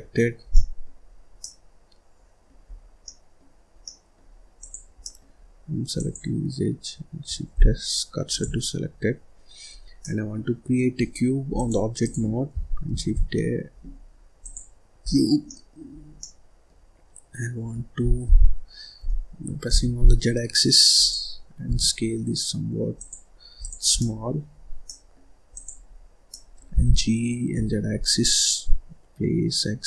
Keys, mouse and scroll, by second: 0.4 scroll down 1, 0.5 middle click, 1.0-1.4 scroll up 3, 1.4-2.7 middle drag, 2.7-3.0 scroll down 2, 3.0 middle click, 3.6 scroll down 1, 3.8 middle click, 4.5 click, 4.9 middle click, 5.9 click, 7.5 shift+s, 9.3-9.6 scroll down 2, 9.6-9.9 scroll up 1, 9.9-11.5 middle drag, 11.5-12.8 drag, 12.8 shift+a, 15.0-15.4 scroll down 1, 15.4 middle click, 15.9 scroll up 1, 16.1 scroll down 1, 16.1-18.2 middle drag, 18.2 g, 21.6 s, 23.5 click, 23.9 middle click, 24.4-24.8 scroll up 3, 24.8 middle click, 25.4 click, 25.8-26.2 scroll up 2, 26.2 middle click, 26.7 g.